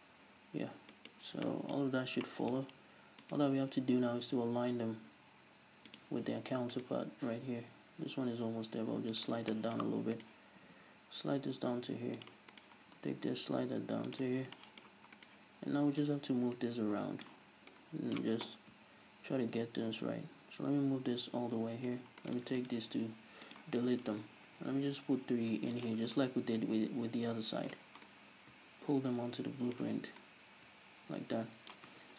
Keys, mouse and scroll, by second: 0.1-0.4 scroll up 1, 1.0-3.3 shift+middle drag, 3.3 right click, 4.4 g, 6.0 click, 6.7 right click, 7.2 g, 9.2 click, 9.5 shift+middle click, 10.2 right click, 10.6 g, 12.3 click, 12.5 right click, 12.9 g, 14.2 click, 14.6 shift+middle click, 15.2 right click, 16.1-17.7 drag, 17.7 right click, 22.2-22.9 right drag, 22.9 x, 23.8 scroll up 1, 24.5 ctrl+r, 25.9 click, 26.2 right click, 30.2 right click, 31.9 Tab.